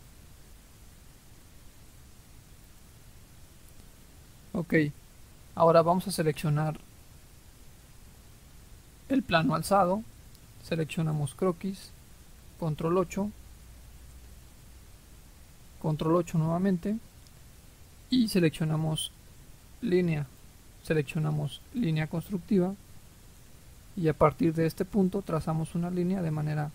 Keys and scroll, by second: 12.7 ctrl+8.